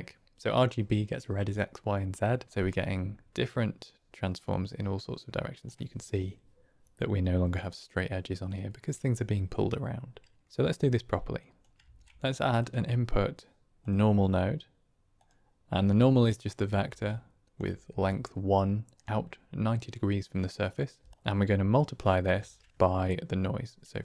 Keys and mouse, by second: 3.3-5.5 shift+drag, 7.5-8.4 drag, 10.4-11.5 drag, 11.9 shift+a, 16.2 drag, 16.8 d, 16.9 click, 17.5 d, 17.6 d, 17.8 d, 17.9-19.0 drag, 18.9 d, 20.9 d, 21.0 click, 21.7 middle click, 22.3 shift+a.